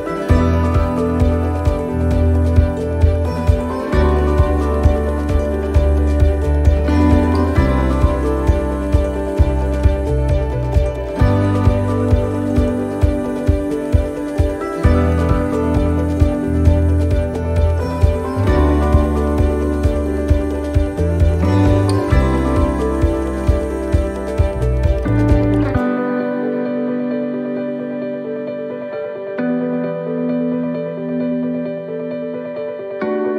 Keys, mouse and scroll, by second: 0.2 click, 1.4 e, 2.6 middle click, 3.3 shift+middle click, 4.9-5.3 scroll up 1, 5.4 shift+middle click, 5.9 scroll up 1, 7.2 ctrl+z, 8.2 middle click, 8.7 scroll down 1, 9.2 shift+middle click, 11.0 right click, 11.5 shift+right click, 12.8 right click, 13.3 shift+right click, 14.0 click, 17.9 shift+middle click, 20.3 middle click, 23.1 ctrl+r, 24.7 s, 28.2 shift+middle click, 33.1 middle click.